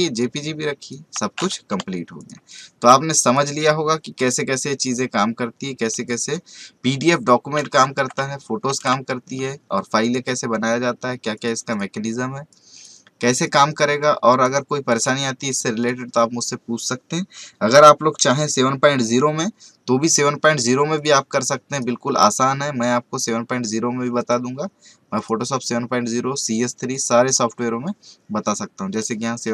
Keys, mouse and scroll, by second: 2.5 right click, 3.2 click, 4.2 right click, 4.8 click, 7.8 v, 8.6 ctrl+w, 10.0-14.9 drag, 20.9 click, 24.1 right click, 25.1 click.